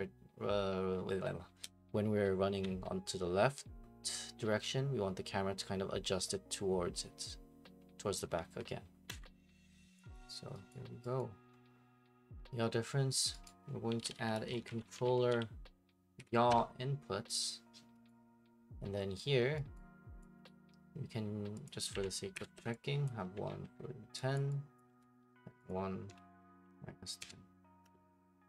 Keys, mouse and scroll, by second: 2.6-28.4 typing, 9.1 Escape, 10.1 click, 10.7 right click, 11.4 right click, 13.4 right click, 16.5 Return, 18.1 right click, 19.7 right click, 20.4 click, 21.7 click, 22.6 Return, 23.0 click, 24.4 click, 24.8 click, 25.8 click, 27.8 Return.